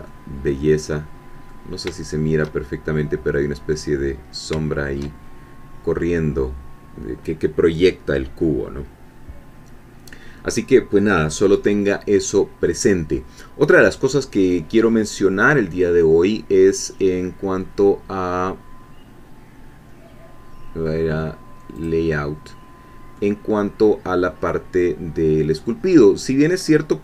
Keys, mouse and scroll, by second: 0.0 click, 0.1-1.6 middle drag, 1.9 shift+middle click, 4.6 shift+middle click, 5.2 shift+scroll down 1, 21.8 click, 23.2-24.6 middle drag.